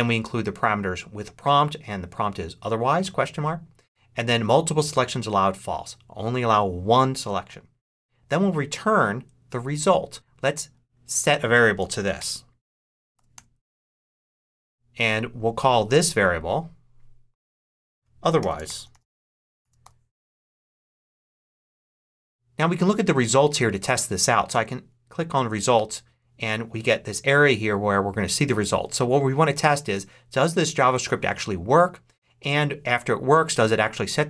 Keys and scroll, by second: 11.5-13.1 typing, 14.2 a, 18.0-19.7 typing.